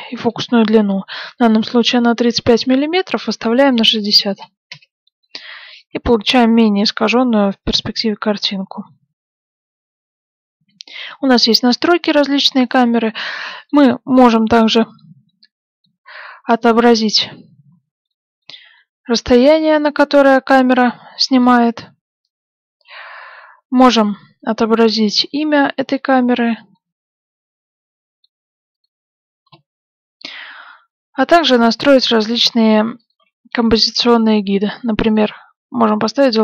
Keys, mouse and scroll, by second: 2.5 click, 5.8 g, 12.0-20.7 middle drag, 17.0 click, 21.1-22.9 middle drag, 24.7 click, 25.4-28.5 middle drag, 28.7 click, 31.4 click, 33.7 KP_0, 35.0 click.